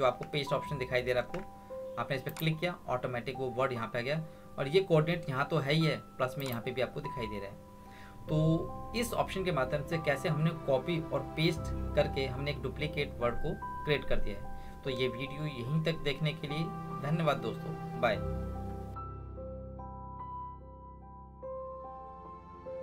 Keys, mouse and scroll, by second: 1.2 ctrl+1, 2.3 click, 6.4 click.